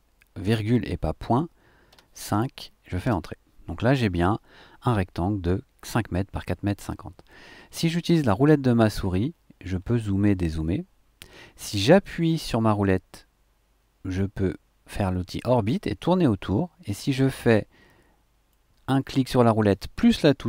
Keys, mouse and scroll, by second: 0.4 ,, 1.9 KP_5, 3.1 KP_Enter, 8.6-9.7 scroll down 1, 9.7-10.2 scroll up 1, 10.4-10.8 scroll down 2, 12.0-18.7 middle drag, 19.1-20.4 middle drag.